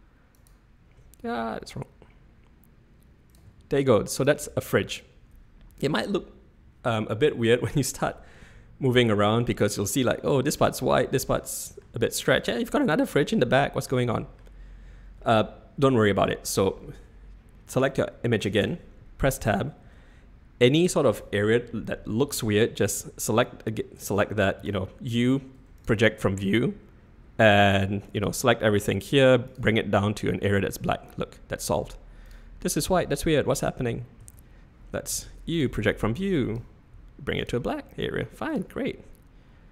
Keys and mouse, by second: 1.2 g, 7.6-9.9 drag, 10.7 click, 11.3 click, 12.3 click, 13.5 click, 15.3-16.3 middle drag, 16.9 Tab, 18.6 Tab, 19.8 3, 24.6 u, 28.0 click, 28.8 g, 31.0 click, 34.2 a, 35.1 u, 36.5 click, 36.9 g, 37.9 middle click, 38.5 click.